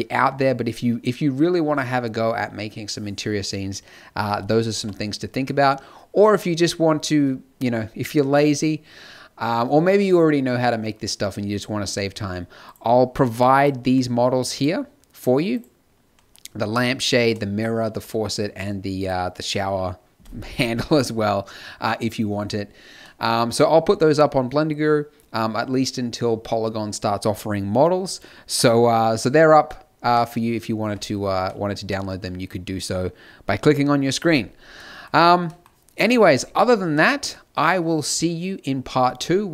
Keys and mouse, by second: 4.7 a, 5.3 middle click, 12.7-14.0 drag, 14.0 middle click, 14.9-17.8 drag, 17.8 z, 18.4 z, 18.9-21.5 drag, 34.4 middle click, 35.1 middle click, 35.9 KP_0, 36.8 a.